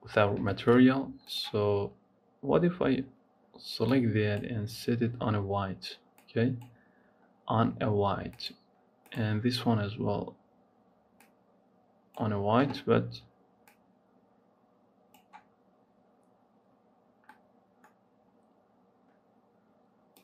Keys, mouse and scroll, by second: 0.4 shift+middle click, 1.1 click, 8.2 click, 17.2 middle click, 18.1-20.1 scroll down 1, 20.1 click.